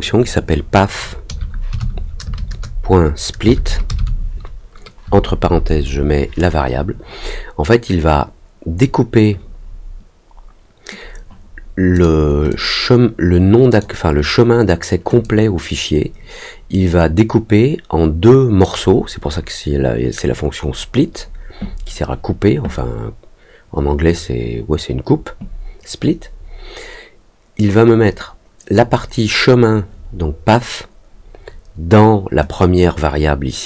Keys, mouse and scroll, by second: 11.9 click, 12.4-13.7 drag, 15.2-18.6 drag, 32.5-33.6 drag.